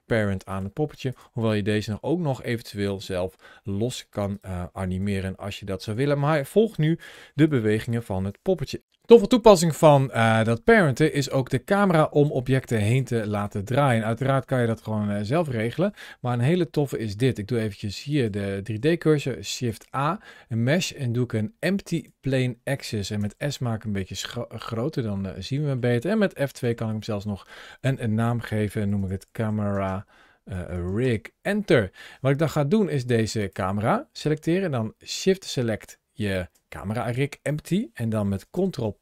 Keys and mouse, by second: 0.3 click, 0.3 g, 0.9 click, 1.2 g, 4.2 right click, 4.8 r, 5.7 click, 6.2 click, 6.9 g, 7.7 click, 13.2 click, 14.0 r, 15.2 click, 17.9 shift+right click, 19.5 shift+a, 23.0 s, 24.4 click, 25.0 middle click, 26.5 F2, 38.4 ctrl+p.